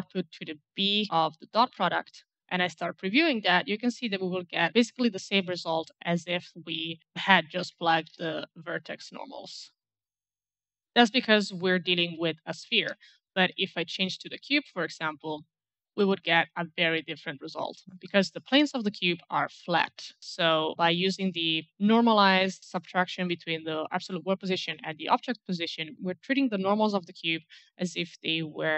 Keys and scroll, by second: 6.9-8.6 typing, 17.8 alt+Left, 25.8 alt+Left.